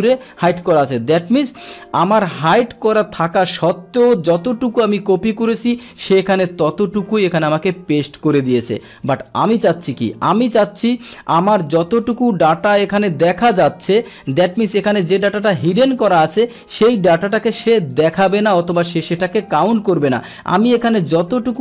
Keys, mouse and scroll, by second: 1.6 click, 3.0-4.0 drag, 6.6-7.2 drag, 8.1 click, 9.0 right click, 10.0 click, 11.1 click, 12.8 click, 13.9 click, 14.7 click, 16.1 right click, 17.3 click, 18.0 click, 20.1-21.6 drag.